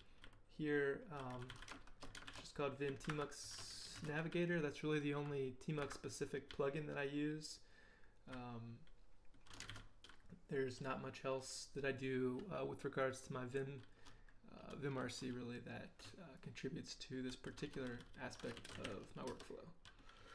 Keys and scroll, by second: 0.0-0.7 typing, 2.3 shift+b, 3.1 Escape, 3.7-5.0 typing, 5.8 Escape, 6.5 j, 7.0 j, 9.4-10.2 typing, 15.3 k, 15.8 k, 18.3-19.3 typing.